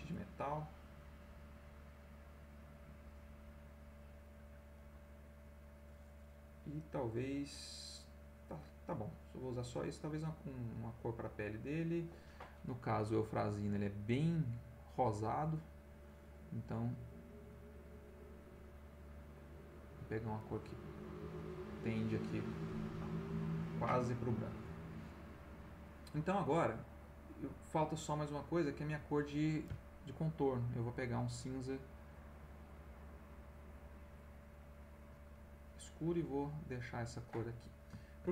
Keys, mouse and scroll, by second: 0.1 click, 0.9-2.5 drag, 5.0 middle click, 7.9-9.2 middle drag, 9.4 middle click, 10.4 right click, 17.3 click, 18.6-19.9 drag, 20.4 click, 21.3 click, 22.4 middle click, 23.0 ctrl+middle click, 24.0 ctrl+middle click, 26.5 middle click, 28.4 right click, 30.8-34.3 drag, 34.8 click, 36.1-37.4 drag, 37.5-38.3 middle drag.